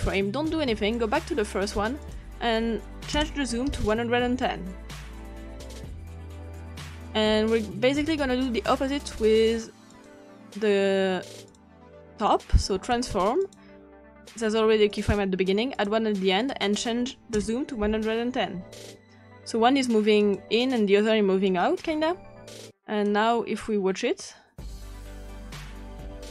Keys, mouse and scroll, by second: 0.8 click, 2.1 click, 3.2 BackSpace, 3.7 1, 5.6 click, 6.4 click, 9.9 click, 11.5 click, 12.3 click, 13.5 click, 14.9 click, 15.8 click, 16.4 click, 17.4 BackSpace, 17.8 1, 20.2 click, 21.5 click, 22.7 click, 24.7 click.